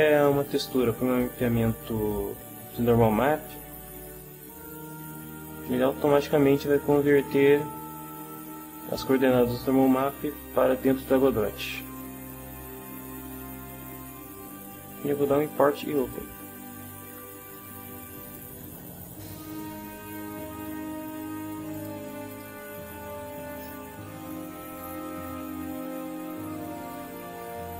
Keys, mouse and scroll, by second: 5.7 click, 16.0 click, 18.2 click, 21.7 click, 22.3 click, 24.0 Caps_Lock, 24.1-25.4 middle drag, 26.3 shift+middle click.